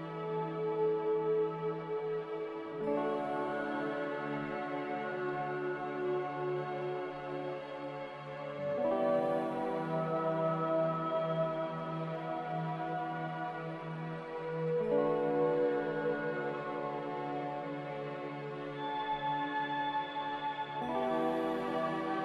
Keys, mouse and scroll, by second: 16.2 x, 18.5-20.3 typing, 19.5 Return.